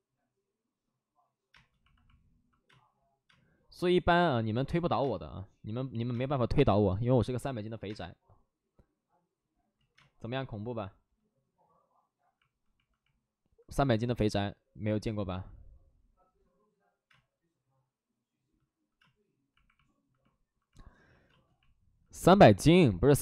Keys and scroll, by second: 1.4 space, 6.0 space, 7.8 space, 9.7 ctrl+z, 9.9 space, 14.1 space, 15.5 ctrl+z, 17.0 space, 18.9 space, 21.2 space.